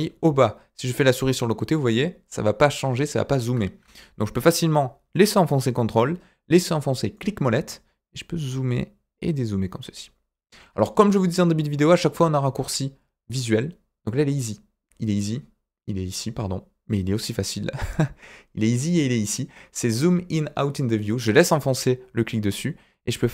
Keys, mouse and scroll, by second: 7.1-10.4 ctrl+middle drag, 21.0-23.3 drag.